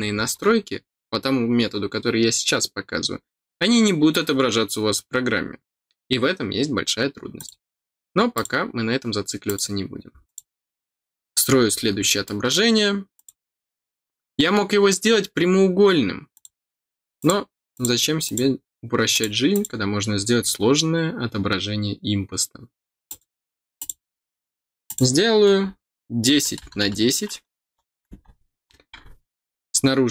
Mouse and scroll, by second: 7.3 click, 8.3 click, 9.4 click, 10.2 click, 11.6 scroll down 2, 12.2 middle click, 13.1 click, 16.3 click, 17.1 click, 17.7 click, 18.2 click, 19.1 click, 19.5 click, 23.0 click, 23.7 click, 24.8 click, 28.6 middle click, 28.6 scroll down 2, 28.8 middle click.